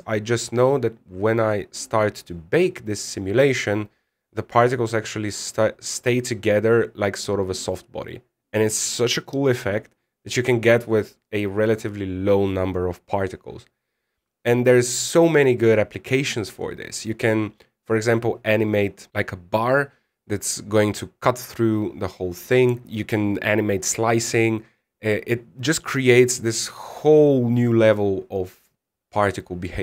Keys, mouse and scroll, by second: 3.7 click, 3.7 scroll down 6, 3.7 scroll down 1, 4.1-4.9 scroll up 2, 7.7-9.2 scroll down 2, 22.8 middle click.